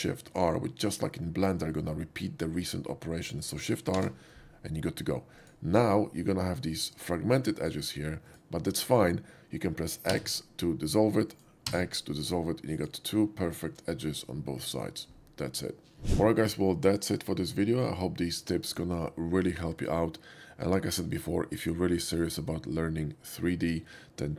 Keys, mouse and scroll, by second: 4.1 shift+r, 5.3 click, 5.7 middle click, 6.0 middle click, 7.0 click, 7.6 click, 8.3 click, 11.4 click, 11.4 x, 12.7 click, 13.4 shift+click, 16.4 typing.